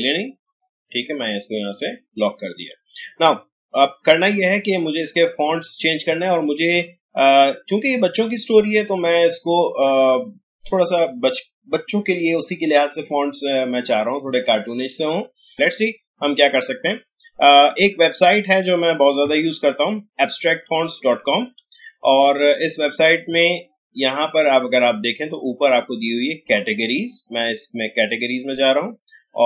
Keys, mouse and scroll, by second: 1.7 click, 5.4 click, 6.8 alt+scroll up 1, 7.6 alt+scroll down 1, 9.8 space, 10.1 click, 10.3 space, 18.5-24.6 drag, 26.8 click.